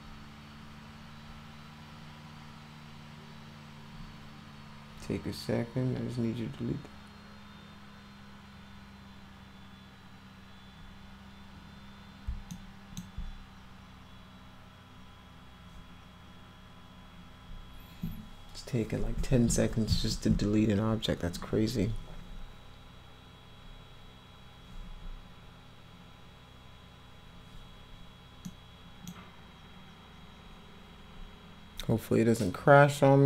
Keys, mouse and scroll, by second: 12.5 alt+middle click, 28.4 middle click.